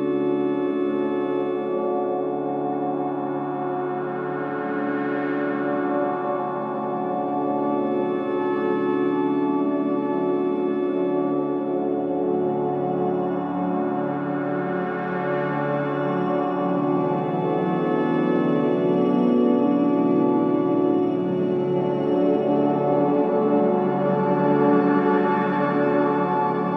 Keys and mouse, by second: 0.4-2.4 alt+drag, 3.2 click, 3.8-5.0 alt+drag, 7.8 k, 8.7 click, 9.9 click, 10.9 Return, 12.6 k, 13.3 click, 17.1 click, 17.9 Return, 20.4 click, 21.2 click, 22.9 Delete, 23.8 click, 24.3 alt+click, 25.6 Tab, 26.2 alt+click.